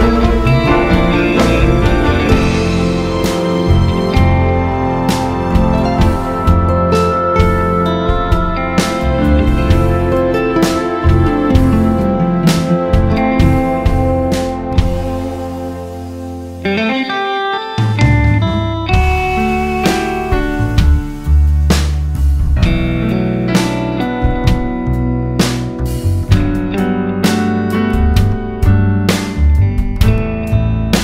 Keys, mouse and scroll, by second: 0.4 scroll down 1, 0.9 KP_0, 1.9 click, 3.7 click, 4.1 click, 7.0 click, 8.9 alt+a, 9.3 scroll down 2, 9.6 scroll up 1, 10.7 click, 11.7 click, 12.9 click, 15.0-18.3 drag, 18.3 alt+a, 21.7 click, 28.8 click, 30.4-31.0 drag.